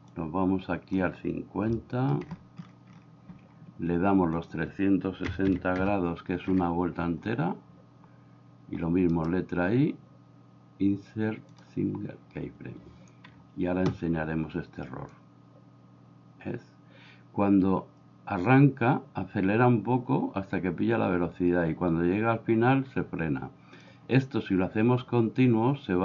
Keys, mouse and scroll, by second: 0.2 click, 1.8 shift+middle click, 4.5-6.5 drag, 9.1-11.6 right drag, 15.1-23.8 drag.